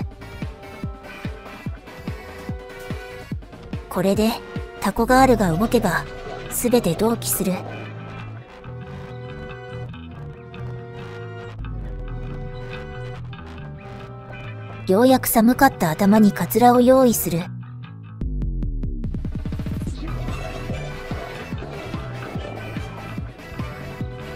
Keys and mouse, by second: 2.2 click, 4.9-6.9 drag, 8.1 ctrl+z, 11.8 click, 15.8-19.9 drag.